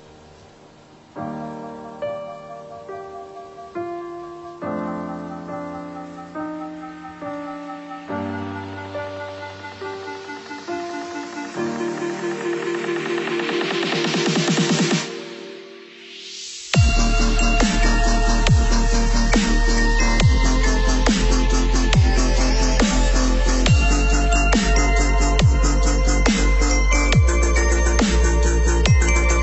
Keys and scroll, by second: 5.1 Delete, 20.6 ctrl+c, 20.8 ctrl+v.